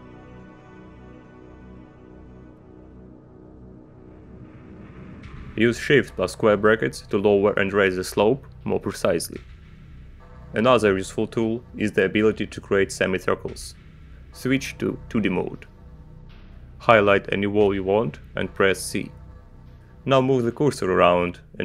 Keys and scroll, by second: 0.4 Return, 1.6 Down, 4.0 alt+f, 5.8 Up, 6.4 Down, 9.3 shift+], 15.9 Return, 19.4 c.